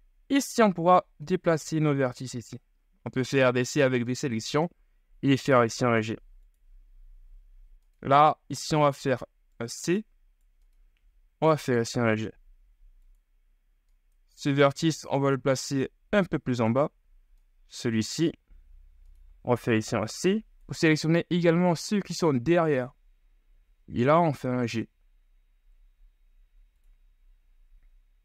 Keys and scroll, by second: 1.5 ctrl+z, 2.4 c, 9.1 g, 18.2 ctrl+z, 19.4 c, 23.7 g.